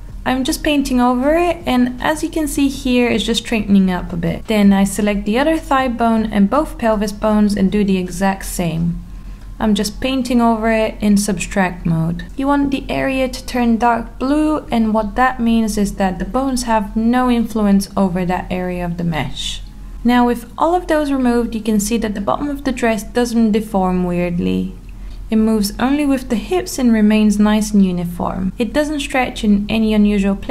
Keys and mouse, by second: 0.6 alt+middle click, 0.8 click, 2.3 click, 2.5 click, 3.0 drag, 3.5 click, 3.8 click, 4.3 alt+middle click, 5.8 click, 6.4 alt+middle click, 7.3 click, 8.0 click, 8.6 alt+middle click, 8.9 click, 9.5 alt+middle click, 10.6-12.2 middle drag, 14.0-14.8 middle drag, 19.7 click, 20.4 Tab, 21.9 middle click, 23.7 g, 28.6 r.